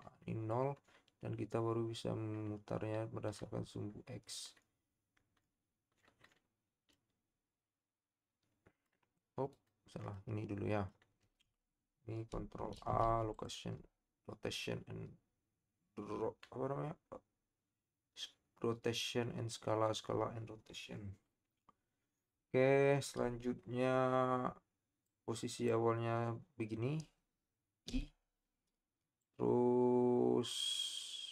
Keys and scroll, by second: 12.7 ctrl+a.